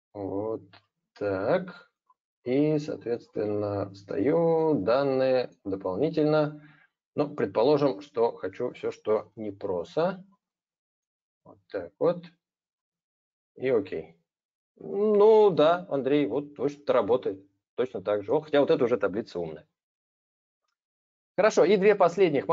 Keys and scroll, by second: 0.0 ctrl+shift+Right, 0.4 ctrl+shift+Down.